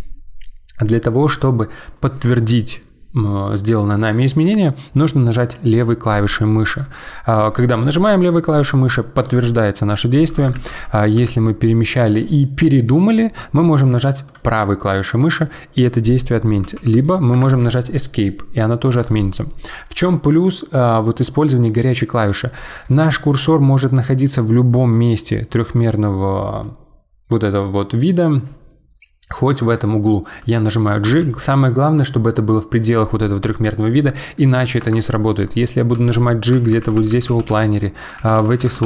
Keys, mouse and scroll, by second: 10.5 ctrl+z, 11.1 g, 16.6 g, 31.0 g, 35.9 g, 36.5 g, 36.7-38.8 g.